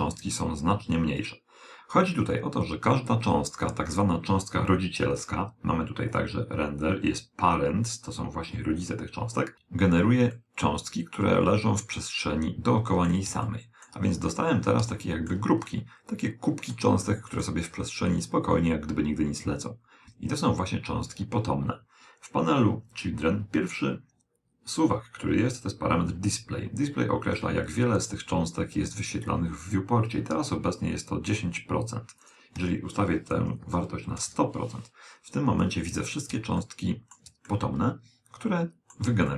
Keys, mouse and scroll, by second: 1.1 click, 6.1 click, 9.5-12.0 middle drag, 13.4-19.5 middle drag, 32.1 click, 33.7 0, 35.9-39.1 middle drag.